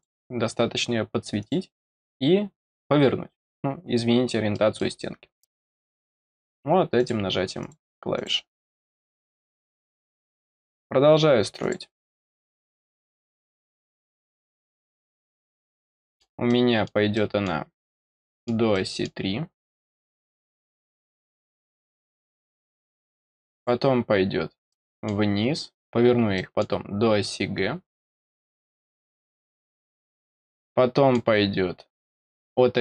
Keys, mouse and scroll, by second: 1.3 click, 3.6-4.0 scroll up 2, 4.5 middle click, 5.4 middle click, 6.9 click, 7.6 click, 8.1 click, 8.6 click, 11.6 click, 15.0 middle click, 15.9 middle click, 16.4 middle click, 17.1 middle click, 18.0 middle click, 18.7 middle click, 20.6 click, 21.2 scroll down 2, 23.5 click, 24.4 scroll down 1, 24.6 middle click, 25.0-26.3 scroll down 1, 26.3 middle click, 28.7 click, 29.2 scroll down 2, 30.1 scroll down 2, 30.4 middle click, 31.4-32.0 scroll up 2, 32.0-32.8 middle drag.